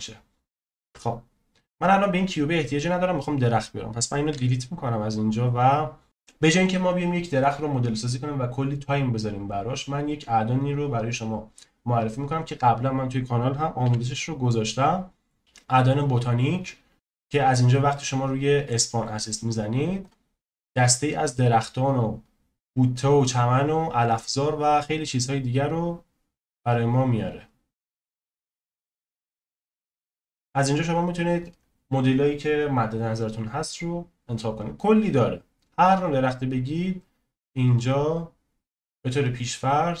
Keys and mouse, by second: 0.8 KP_0, 4.3 Delete, 6.0 n, 13.8 n, 18.8-40.0 drag.